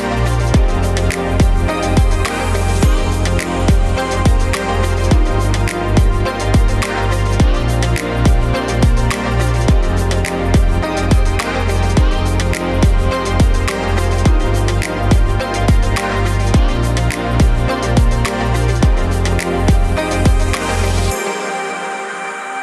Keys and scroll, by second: 0.6-2.3 typing, 2.8 ctrl+t, 6.9-7.3 shift+Left, 9.6 7, 9.8 Return, 17.7 ctrl+z.